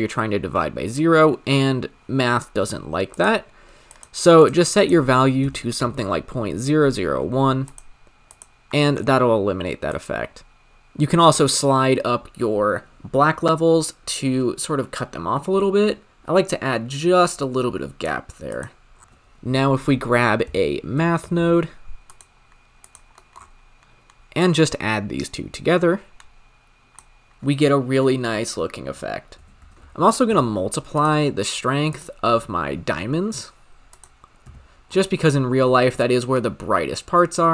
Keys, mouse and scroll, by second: 10.0 click, 18.4 click, 18.9 scroll down 2, 19.0-22.2 drag, 23.3 middle click, 23.4-24.2 scroll up 5, 24.2 scroll up 3, 24.3 drag, 28.0 middle click, 28.4-29.6 scroll up 6, 31.0 shift+a, 32.4-33.0 scroll down 9, 33.0-33.9 scroll up 9, 33.9-34.9 drag, 34.9-36.1 scroll up 7, 36.1-37.5 shift+drag.